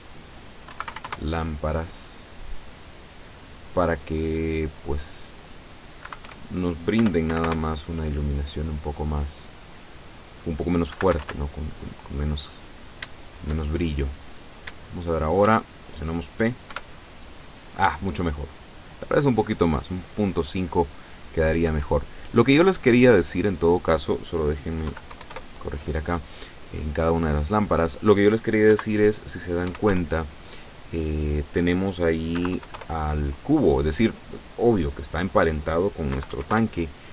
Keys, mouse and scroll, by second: 0.7 KP_Decimal, 0.9 KP_4, 1.0 KP_Enter, 2.8 right click, 3.5-4.5 drag, 5.2 click, 6.0 KP_Decimal, 6.3 KP_3, 7.0 BackSpace, 7.3 KP_4, 7.5 KP_Enter, 8.9 right click, 10.2 click, 10.9 KP_Decimal, 11.1 KP_4, 11.3 KP_Enter, 12.4-12.8 scroll up 1, 13.2-14.4 shift+middle drag, 14.4-15.5 scroll up 2, 15.7 shift+scroll down 2, 16.7 p, 21.7 Escape, 23.5 click, 24.9 KP_Decimal, 25.1 KP_5, 25.4 KP_Enter, 25.9-26.3 scroll down 1, 26.8 right click, 27.9 click, 28.8 KP_Decimal, 29.7 KP_5, 29.9 KP_3, 31.4 click, 32.4 KP_Decimal, 32.6 KP_5, 32.8 KP_Enter, 33.8 right click, 35.2 click, 36.2 KP_Decimal, 36.3 KP_5, 36.6 KP_Enter.